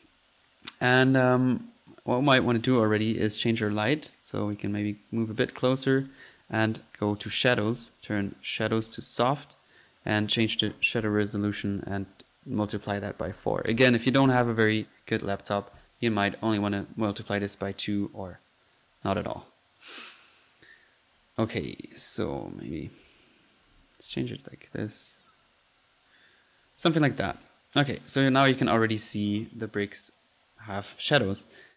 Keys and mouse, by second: 0.0-0.7 typing, 0.0 click, 1.4 click, 2.2 click, 3.3 drag, 4.4 middle click, 5.8 right drag, 5.9-6.3 drag, 6.4-6.7 drag, 7.2-7.7 drag, 7.8 click, 8.7 click, 10.2 click, 10.7 click, 16.5-16.9 drag, 18.8 click, 19.7 middle click, 20.4-20.8 drag, 21.6-22.8 drag, 24.1 click, 24.8 click, 25.3 click, 26.6 drag, 26.8 middle click, 27.5 drag, 28.3 click.